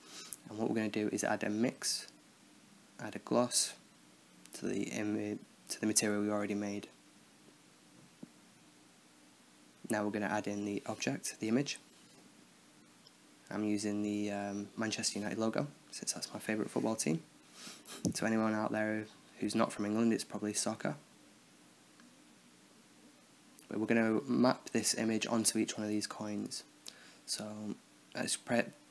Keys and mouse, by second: 0.2-1.2 drag, 0.6 shift+a, 2.2-3.7 drag, 4.4-6.8 drag, 9.5-13.1 drag, 15.2-16.1 drag, 16.9-18.0 drag, 19.2 KP_0, 21.1-22.2 drag, 24.8-26.6 right drag, 26.6 middle click, 26.8-28.1 drag.